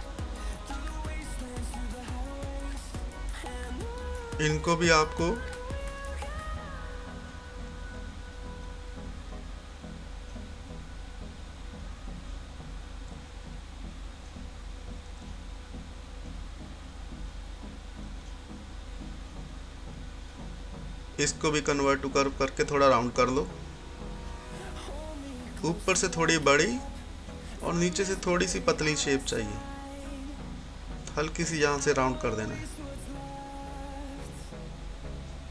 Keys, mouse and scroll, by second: 15.3 scroll up 1, 16.8-20.5 drag, 21.1 click, 24.3-26.8 drag, 26.8 scroll down 1, 26.9 typing, 27.4 scroll up 1, 29.2-35.5 drag.